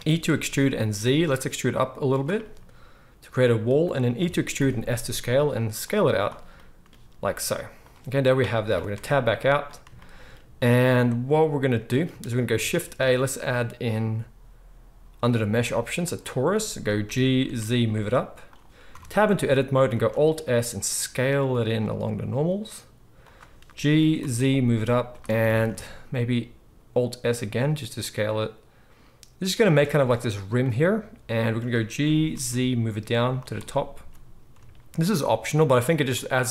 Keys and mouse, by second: 0.0 e, 4.2 e, 6.1 click, 7.3 s, 8.9 Tab, 12.5 shift+a, 17.0 g, 17.5-22.2 middle drag, 18.9 Tab, 19.9 alt+s, 22.2 shift+click, 22.7-36.5 shift+middle drag, 23.8 g, 25.4 alt+s, 32.0 g, 33.9 s.